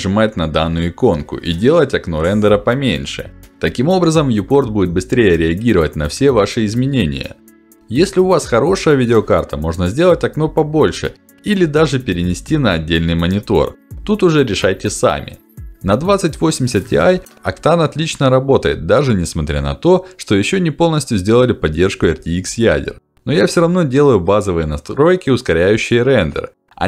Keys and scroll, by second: 0.6 ctrl+alt+d, 3.4 ctrl+alt+d.